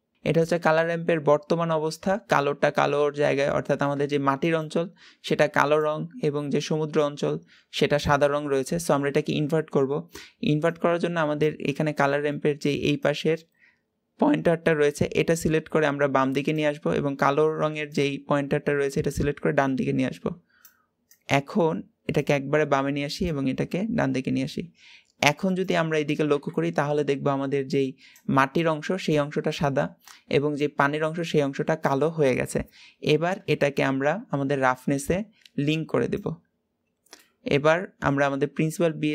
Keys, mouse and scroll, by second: 0.1 ctrl+shift+click, 3.4-14.6 shift+middle drag, 14.6-15.9 drag, 18.7-39.1 drag.